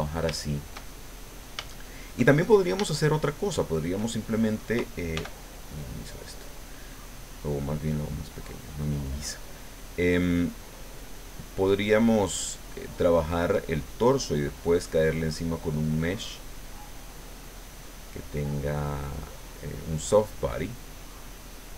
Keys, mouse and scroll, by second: 0.3 shift+click, 0.9 shift+click, 1.7 shift+click, 2.3 shift+click, 2.9-4.1 shift+drag, 5.1 f, 5.9 click, 7.1-8.7 drag, 9.1-10.5 drag, 11.3 click, 12.5 click, 13.5-14.6 drag, 15.4-17.0 drag, 17.5-19.1 drag, 20.6 click.